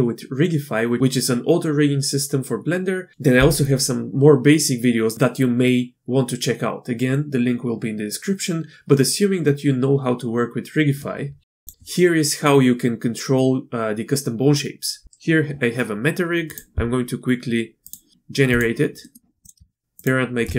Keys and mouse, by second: 11.5 click, 16.5 drag, 17.9 drag, 19.0 click, 19.4 drag.